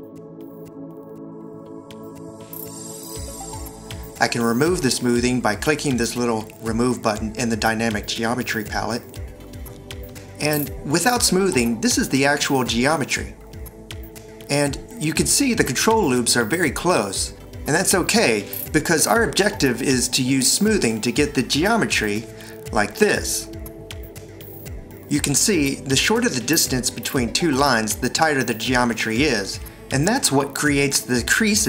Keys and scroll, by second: 3.5 alt+r, 4.1 shift+x, 18.7 c.